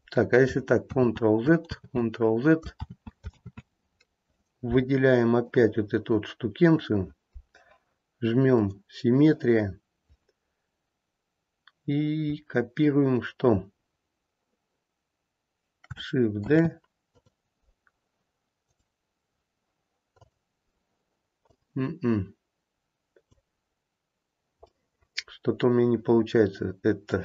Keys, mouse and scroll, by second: 0.8 ctrl+z, 1.6 ctrl+z, 2.8 ctrl+z, 5.4 ctrl+z, 5.4 click, 8.6 click, 16.4 shift+d, 18.6 right click, 21.4 click, 24.7 middle click.